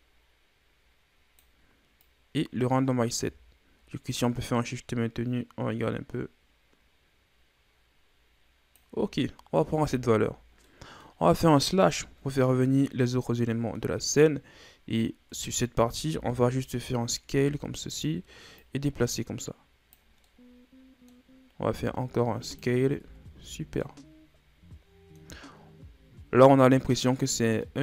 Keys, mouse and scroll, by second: 2.0-5.0 drag, 9.6 Tab, 10.6-11.9 middle drag, 11.9 KP_Divide, 13.4 middle click, 13.9-15.3 scroll up 2, 15.3 Tab, 15.8 a, 16.1 a, 17.2 s, 18.6-20.2 drag, 20.2-21.6 middle drag, 21.6 s, 23.0 Tab, 23.4 a, 23.6 scroll down 1, 23.8-25.4 middle drag, 25.4-25.9 scroll up 1, 25.9-26.6 scroll up 1, 26.6-27.3 middle drag, 27.3-27.6 scroll up 1, 27.6 middle click.